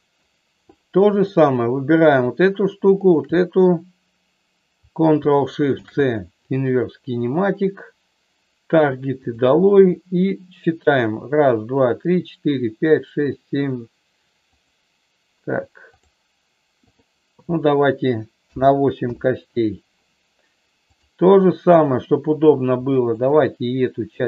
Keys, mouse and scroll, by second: 1.0-2.4 drag, 3.1-4.4 shift+drag, 5.7 ctrl+shift+c, 9.2 click, 9.8 click, 14.5-16.0 drag, 16.9-19.9 drag, 20.9-22.2 drag, 23.2-24.2 shift+drag.